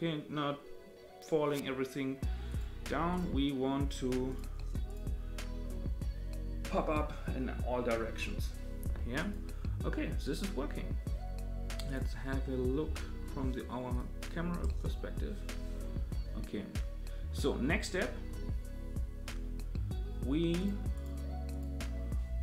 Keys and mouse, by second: 2.5 click, 3.1 click, 4.3 click, 4.9 click, 9.2 click, 11.9 click, 12.8 KP_0, 13.9 click, 14.7 KP_0, 20.6 click, 20.9 click.